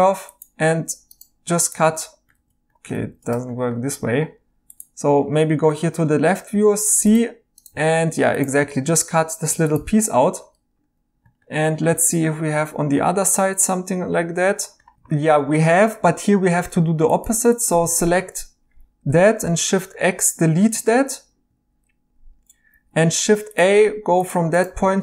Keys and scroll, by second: 2.3 ctrl+z, 2.9 ctrl+z, 6.5 c, 8.0 Tab, 9.2 Tab, 10.4 Tab, 19.4 x, 22.7 a.